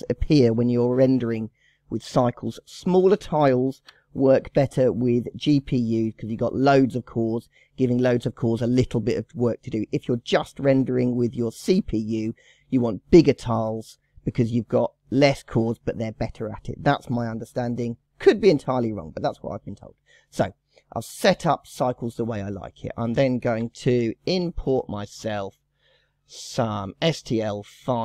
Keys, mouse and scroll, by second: 3.1-5.7 drag, 20.5 click, 21.7 scroll down 1, 21.7 scroll up 5, 23.2 click, 23.6 Delete, 24.9-28.0 drag.